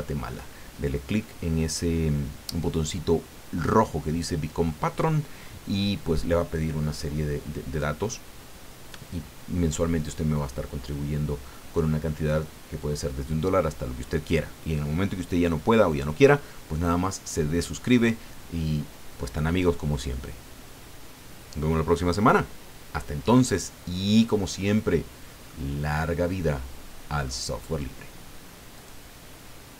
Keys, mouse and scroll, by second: 23.5 click, 24.5-24.9 scroll up 1, 25.1 scroll down 1, 25.4-27.4 drag, 28.7 click.